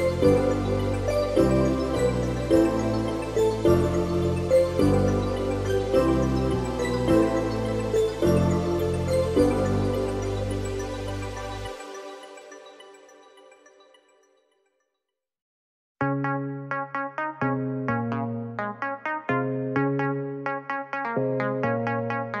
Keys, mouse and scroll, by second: 0.4 s, 1.7 Tab, 2.2 middle click, 2.7 click, 3.2 shift+click, 4.2 e, 4.8 click, 6.0 middle click, 6.7 click, 7.6 click, 8.4 click, 9.0 shift+click, 9.4 shift+click, 10.0 ctrl+b, 12.7 Tab, 13.0-13.9 right drag, 13.9-14.6 middle drag, 14.5 click, 15.4-15.8 scroll up 4, 15.9 shift+click, 17.4 r, 19.4 click, 21.1 r, 21.2 r.